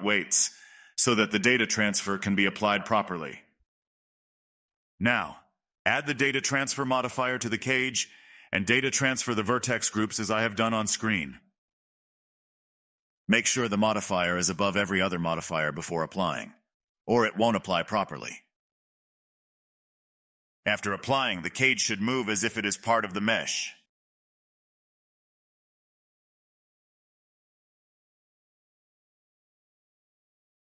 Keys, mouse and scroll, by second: 0.0 click, 0.8 click, 1.2-3.6 middle drag, 3.6 click, 4.4-5.8 middle drag, 6.7-9.0 drag, 9.6 click, 11.7-12.6 scroll down 2, 13.1 click, 13.5-14.1 drag, 15.9-16.8 scroll up 3, 16.8-20.8 drag, 21.1-21.8 middle drag, 21.8 click, 22.1-22.8 middle drag, 22.8-23.6 drag, 23.6 middle click, 24.1 click, 24.8-25.9 drag, 29.0 ctrl+z, 30.0 click.